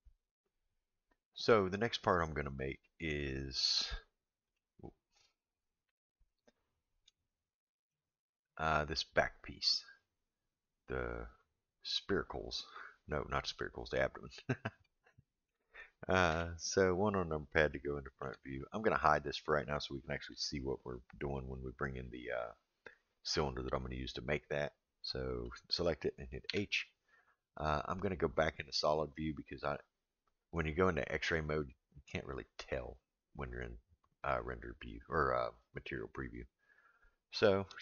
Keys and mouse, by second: 0.2 middle click, 3.9-4.6 middle drag, 5.8 KP_1, 7.2-7.9 shift+middle drag, 15.0-15.5 shift+middle drag, 16.3 KP_1, 17.7-18.2 shift+middle drag, 18.6 click, 25.4 click, 26.4 h, 32.6 click.